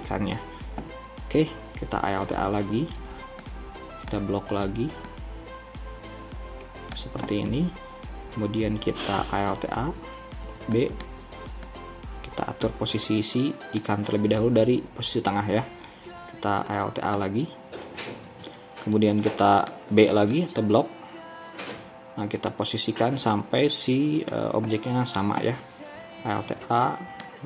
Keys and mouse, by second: 2.4 alt+a, 3.0 b, 5.3-9.5 drag, 9.8 alt+a, 10.4 b, 12.8-16.2 drag, 16.2 b, 18.4 alt+a, 19.0 b, 21.2-26.2 drag, 26.3 alt+a, 26.7 b.